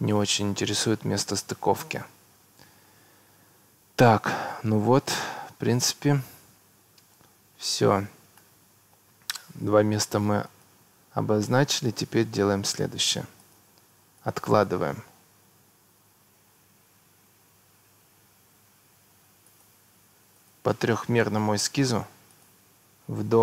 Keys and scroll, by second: 7.6 Escape, 17.6 Escape.